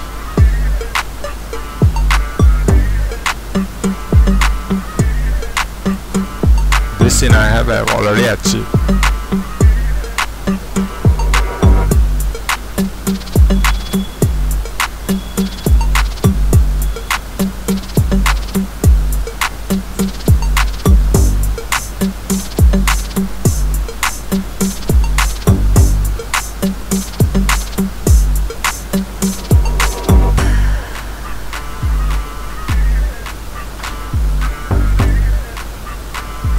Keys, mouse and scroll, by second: 3.0 scroll down 2, 4.0-6.9 drag, 6.3-7.6 scroll up 2, 8.9-9.5 scroll down 2, 11.7-14.2 drag, 14.7-16.0 drag, 16.0-17.1 scroll up 2, 17.4-18.0 scroll down 2, 18.0-19.7 scroll down 1, 19.7-21.3 scroll up 2, 21.3-24.2 scroll up 1, 24.2-25.7 drag, 25.7-28.9 scroll up 2, 28.9-30.7 scroll up 1, 34.9 right click, 35.1-36.2 drag.